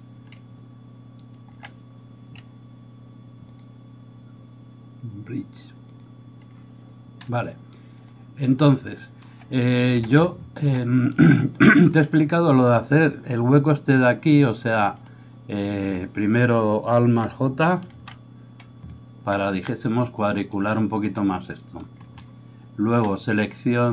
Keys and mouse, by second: 1.1 alt+shift+right click, 11.2-17.2 middle drag, 11.2-17.2 right drag, 18.3 alt+j.